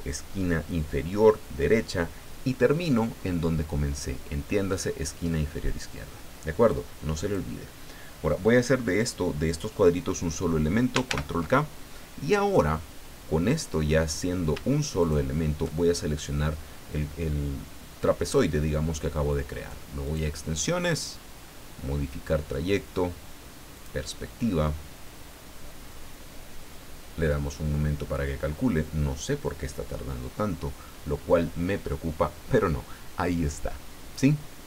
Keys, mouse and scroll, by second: 6.7 click, 11.0 ctrl+k, 15.0 shift+click, 20.0 click, 23.7 click.